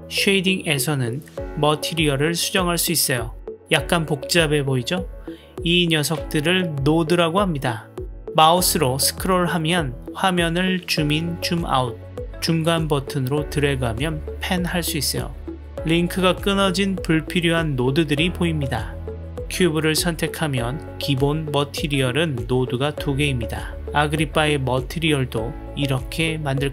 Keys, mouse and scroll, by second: 8.6 click, 9.6 middle click, 10.1 middle click, 11.1-11.8 middle drag, 12.5-15.6 middle drag, 17.6-19.2 middle drag.